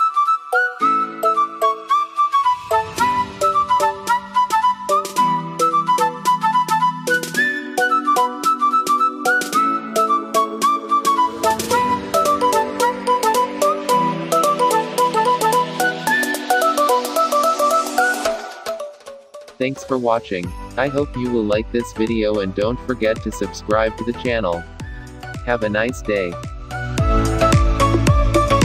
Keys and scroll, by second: 9.3 ctrl+=.